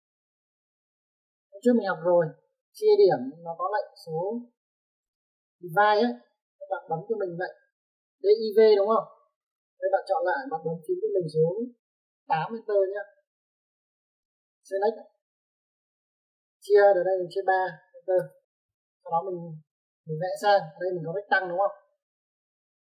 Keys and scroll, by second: 1.8 space, 7.4 Escape, 12.6 8, 13.9 space, 17.9 3, 18.5 Return.